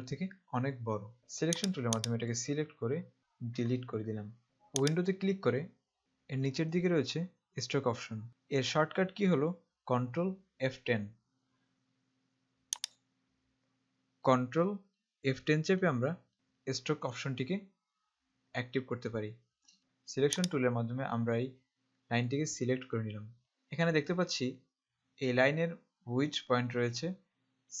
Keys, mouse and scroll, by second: 1.8 click, 4.4 click, 12.9 click, 18.3 F10, 19.8 click.